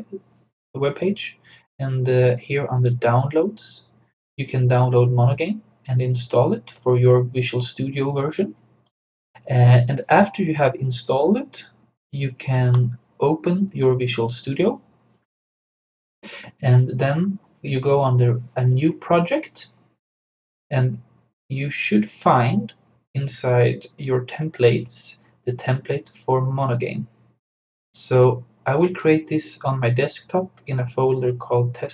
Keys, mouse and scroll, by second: 2.9 click, 12.1 click, 18.7 click, 19.0 click, 21.5-24.8 drag, 25.5 click, 29.0-31.9 drag.